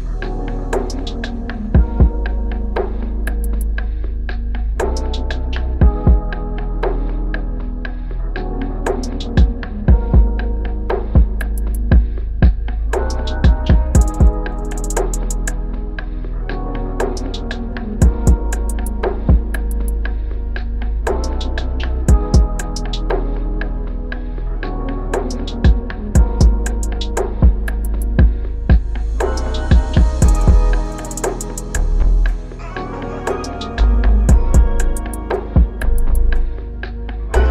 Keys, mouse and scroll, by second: 0.3 Down, 0.7 Down, 4.7 ctrl+t, 12.6 Return, 16.4 ctrl+-, 16.8 ctrl+-, 21.1 alt+Tab, 24.1 double click, 25.7 alt+Tab, 29.0 alt+click, 33.6 ctrl+r, 35.9 ctrl+=, 36.2 ctrl+=, 36.8 ctrl+=.